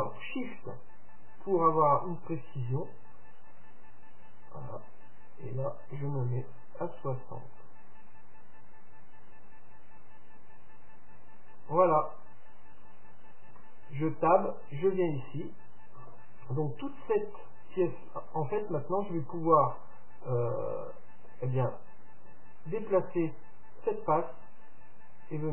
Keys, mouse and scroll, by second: 13.6 Tab, 14.0-16.4 middle drag, 18.6-23.0 middle drag.